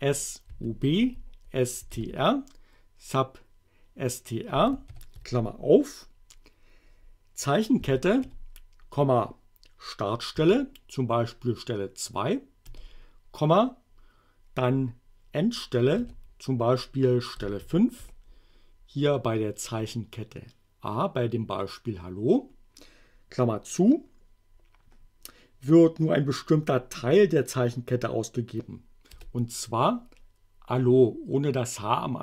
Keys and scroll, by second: 0.5-2.4 typing, 4.9 shift+8, 7.9 a, 8.3 ,, 10.4 2, 12.7 ,, 16.0 5, 17.6 shift+9, 29.2 Return.